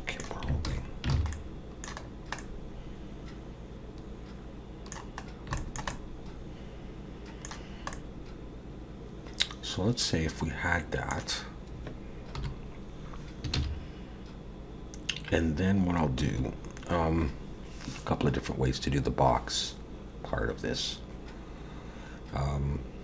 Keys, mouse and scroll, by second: 0.7 alt+h, 1.1 alt+a, 1.3 middle click, 2.0 scroll down 2, 2.4 middle click, 5.3 scroll down 1, 5.6 shift+middle click, 5.9 middle click, 7.9 middle click, 12.4 KP_7, 13.5 shift+a.